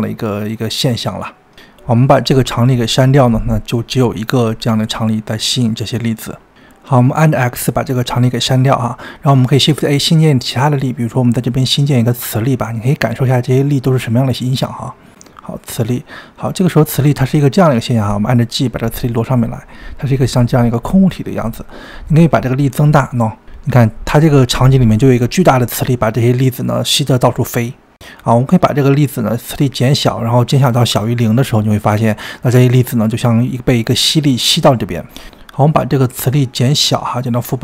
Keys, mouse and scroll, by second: 4.6 click, 6.6 click, 8.0 x, 9.3 shift+a, 18.5 g, 22.1-28.1 drag, 31.4-32.8 drag, 33.9-35.4 drag, 36.0-37.6 drag.